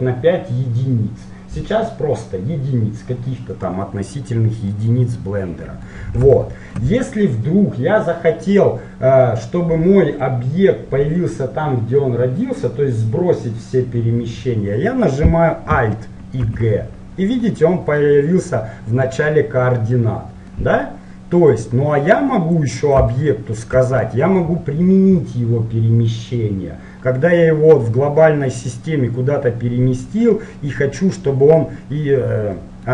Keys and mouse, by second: 4.8-8.2 middle drag, 16.5 alt+g, 17.5-21.7 middle drag, 21.7-23.7 drag, 23.7-26.0 middle drag, 30.3-32.2 middle drag, 32.7-32.9 middle drag.